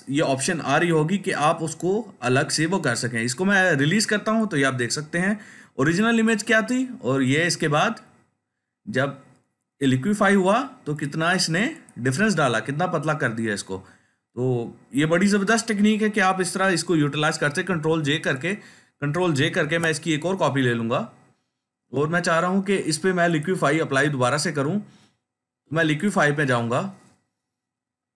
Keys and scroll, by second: 17.6 ctrl+j, 19.5 ctrl+j.